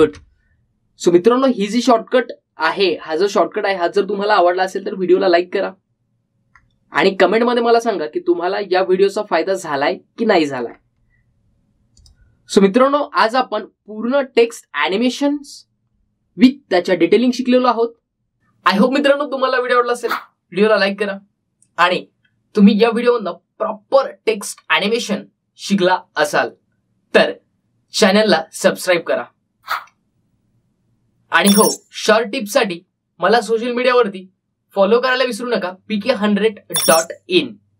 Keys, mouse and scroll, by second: 1.2 space, 2.8 click, 3.9-4.5 scroll down 1, 7.7-8.9 scroll down 1, 11.8-13.1 scroll down 1, 13.1 click, 15.4-17.2 scroll down 1.